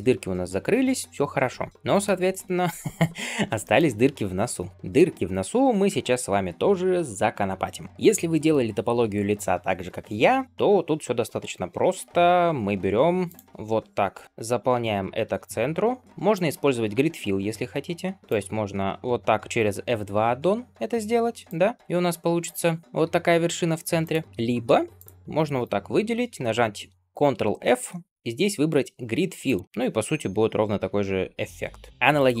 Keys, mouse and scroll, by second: 1.5 scroll down 2, 1.7-2.2 shift+middle drag, 2.2 scroll up 2, 3.0-3.3 scroll down 2, 3.5 shift+middle click, 3.8 scroll up 2, 4.4 middle drag, 4.7 click, 4.7 scroll up 1, 4.8-5.3 middle drag, 5.3 Tab, 5.8 shift+middle click, 7.9 shift+middle click, 13.1 click, 13.6 f, 14.4 click, 14.8 shift+click, 15.4 f, 16.2 click, 16.8 shift+click, 17.4 f, 18.2 click, 18.7 shift+click, 20.4 f, 21.3 click, 21.8 g, 22.9 g, 24.5 x, 25.5 alt+click, 27.5 ctrl+f, 31.9 f, 32.0 click.